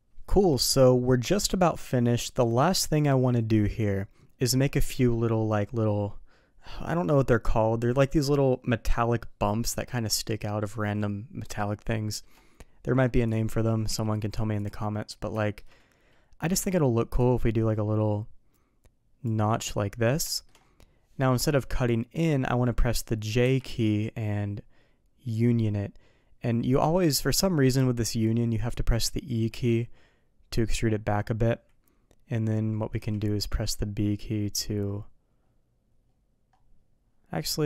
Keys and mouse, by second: 15.2 shift+d, 15.3 middle drag, 17.2-37.6 drag, 19.4-37.6 middle drag.